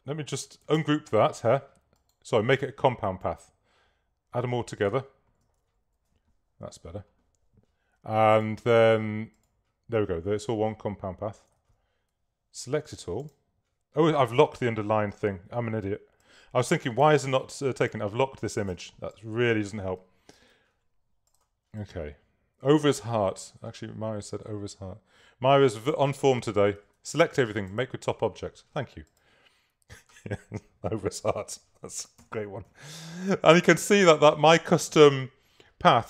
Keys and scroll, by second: 0.9 shift+super+g, 5.7 shift+x, 11.7 super+a, 17.1 l, 18.8 v, 20.7 super+z, 26.9 super+a, 32.3 super++, 33.6 super+space, 34.3 space.